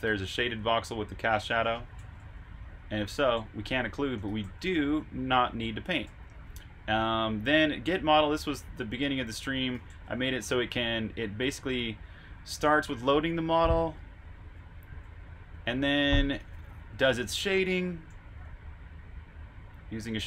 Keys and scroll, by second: 0.0-8.1 typing, 9.5-11.3 typing, 12.4-14.9 typing, 20.0-20.2 typing.